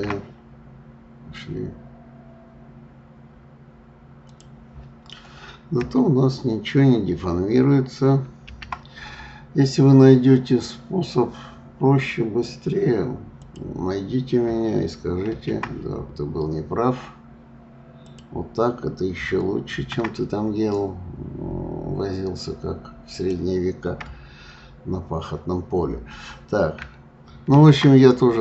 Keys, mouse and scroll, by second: 8.5 shift+d, 15.3 shift+d, 19.8 shift+d, 27.5 shift+d.